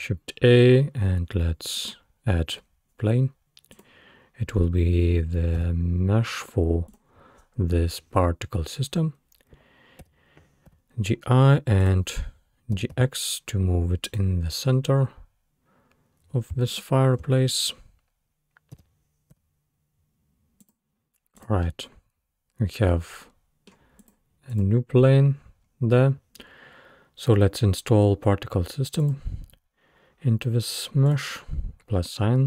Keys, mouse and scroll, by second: 0.0 shift+a, 3.7 click, 5.6 s, 10.0 g, 12.8 g, 14.7-15.8 scroll up 5, 15.9-16.4 scroll down 2, 16.5 scroll down 1, 16.7 shift+click, 18.8 g, 21.4 click, 21.7-24.0 middle drag, 24.0 click, 24.5 click, 25.4-26.4 scroll up 5, 29.0 click, 31.1-32.4 drag.